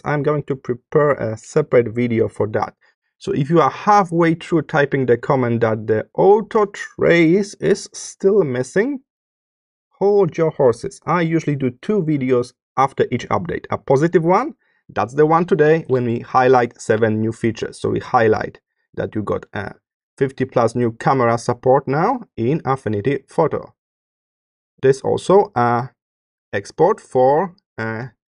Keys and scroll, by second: 24.0 space, 26.5 space.